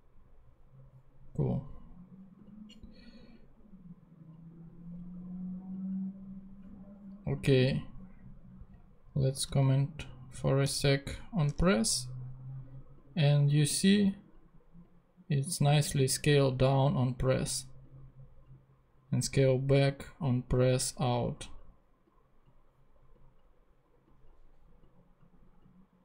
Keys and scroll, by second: 10.6 super+/, 11.4 super+Tab.